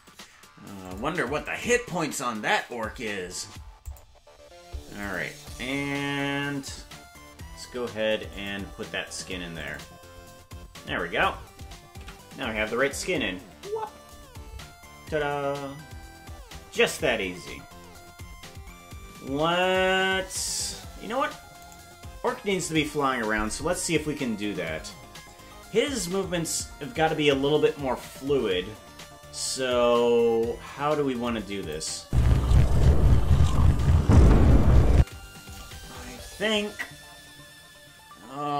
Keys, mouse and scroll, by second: 8.3 click, 12.0 KP_Decimal, 17.2-17.8 scroll down 9, 19.7 right click, 21.8 right click, 28.8 KP_0, 29.8 KP_0, 31.3 click, 32.0 space, 35.0 space.